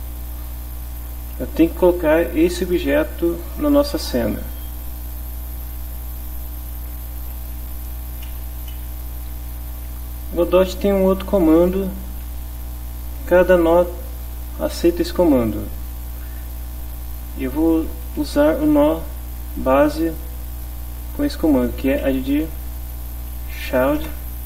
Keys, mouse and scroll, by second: 3.3 click, 4.7 click, 8.7 Home, 17.6 space, 18.1 Left, 21.8 a, 22.0 d, 22.6 shift+-, 24.0 Return.